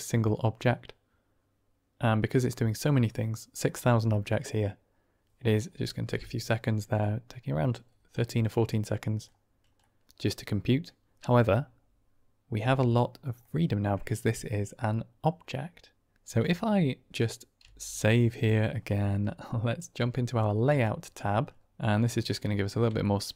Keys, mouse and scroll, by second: 6.9-7.5 middle drag, 8.1-9.1 middle drag, 9.7-10.7 middle drag, 13.3-13.8 drag, 17.5 ctrl+s, 21.6 n, 22.0-22.3 drag, 22.9 shift+drag, 23.2-23.3 drag.